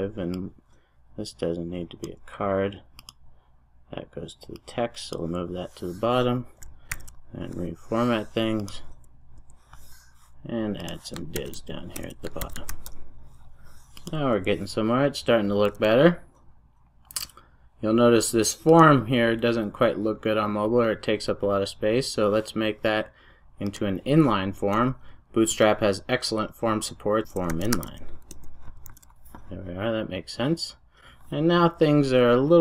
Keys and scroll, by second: 13.4 super+s, 28.3 Return, 29.1 super+s.